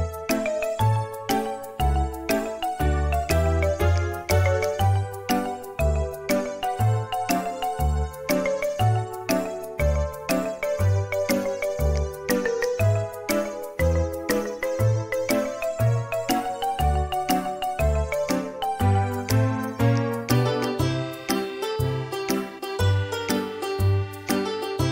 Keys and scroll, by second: 3.4 ctrl+z, 10.5 l, 12.9-14.5 typing, 18.6 Delete, 22.1 Return, 22.4 Return.